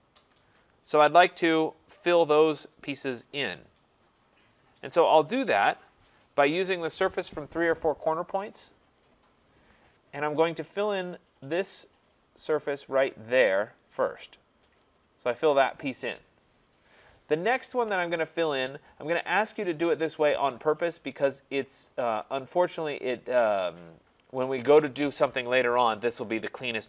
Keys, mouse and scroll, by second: 0.6 right click, 2.8 right click, 3.5-4.1 scroll, 4.2 click, 9.1 click, 11.0 click, 11.9 click, 13.0 click, 13.8 click, 17.1 right click, 17.5 scroll, 18.2 scroll, 19.1 right click, 19.5-20.4 scroll, 24.3 middle click, 24.4 scroll.